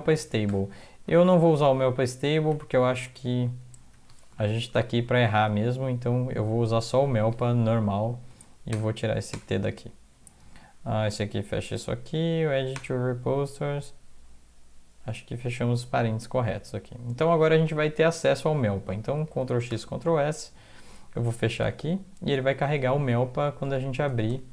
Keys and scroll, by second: 0.1 Left, 0.5 BackSpace, 1.0 Right, 1.2 Right, 1.4 Right, 1.5 Right, 2.5 Delete, 2.7 Delete, 2.9 Delete, 3.1 Delete, 4.0 Delete, 4.9 ctrl+Right, 5.5 ctrl+Left, 6.0 Delete, 6.2 Delete, 6.4 Delete, 7.7 End, 8.1 Left, 8.3 Left, 8.7 BackSpace, 9.3 BackSpace, 12.5 End, 12.8 BackSpace, 19.3 ctrl+x, 19.7 ctrl+s, 21.4 alt+F4, 22.7 alt+Tab, 24.1 alt+Tab, 24.3 alt+Tab.